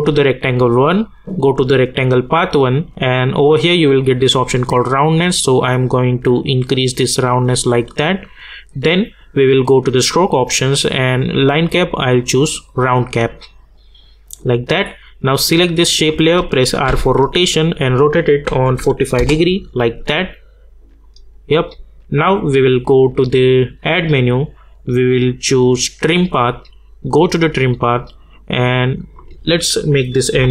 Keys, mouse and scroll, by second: 8.8 click, 16.8 r, 17.9 click, 19.2 Return, 21.0 click.